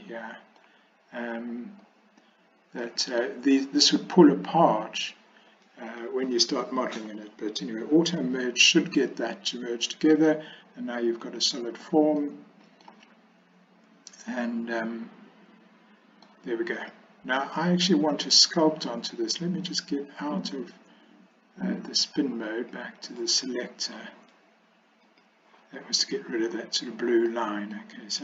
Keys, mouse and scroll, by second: 0.0 scroll up 1, 0.2 middle click, 0.7 scroll down 1, 2.9 middle click, 3.3-4.0 scroll down 1, 6.0 scroll up 1, 6.2 middle click, 7.1 click, 12.3 middle click, 14.3-16.3 middle drag, 16.9 click, 22.5 click, 25.2 click, 27.4 middle click.